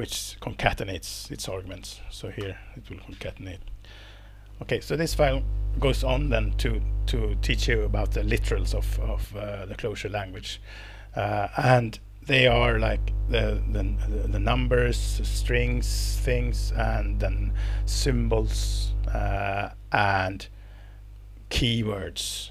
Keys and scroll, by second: 2.4 alt+Return, 3.6 BackSpace.